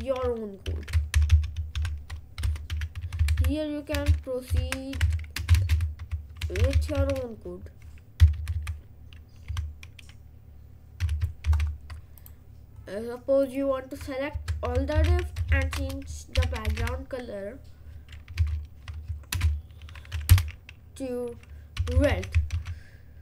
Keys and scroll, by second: 0.7 /, 1.2 shift+8, 2.5 BackSpace, 2.8 /, 3.0 Left, 4.1-7.5 typing, 5.1 Right, 5.7 Left, 8.3 Left, 9.5 Delete, 11.1 o, 11.5 ctrl+s, 14.5-17.3 typing, 18.4 ctrl+v, 19.3 ctrl+space, 20.6 Return, 21.6-22.8 typing.